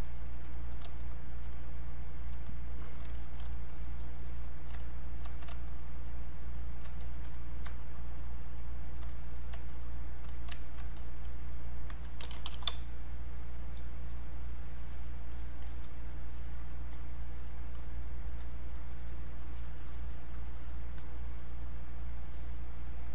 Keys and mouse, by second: 3.7-5.7 shift+drag, 5.7-7.0 shift+drag, 7.8-9.7 shift+drag, 9.7 shift+click, 11.9-13.1 typing, 13.1 click, 14.0-23.1 drag.